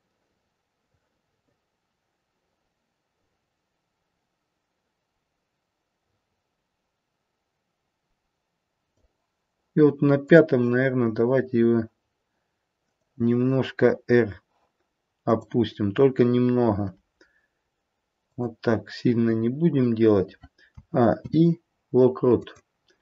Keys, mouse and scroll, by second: 10.2 click, 12.9 click, 16.7 r, 20.6 a, 21.1 i, 22.9 space.